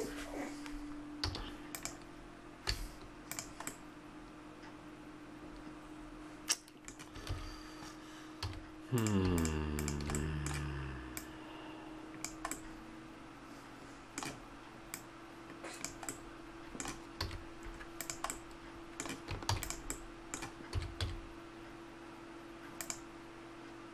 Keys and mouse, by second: 1.2 a, 1.7 right click, 2.7 x, 3.7 middle click, 7.3 ctrl+z, 8.4 a, 9.0-12.6 right drag, 12.6 middle click, 13.2 middle click, 13.3-16.8 middle drag, 17.2 a, 18.0 right click, 18.4-19.8 middle drag, 19.5 shift+d, 20.0-22.8 drag, 20.7 s.